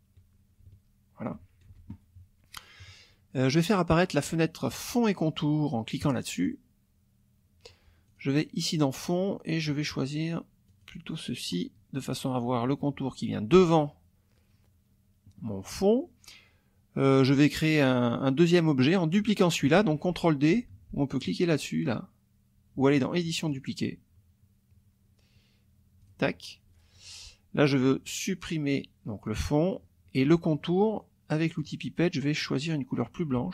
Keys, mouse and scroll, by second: 1.7 ctrl+F1, 6.0 click, 8.1 click, 10.7 click, 23.5 click, 26.0 click, 29.3 click, 31.6 click.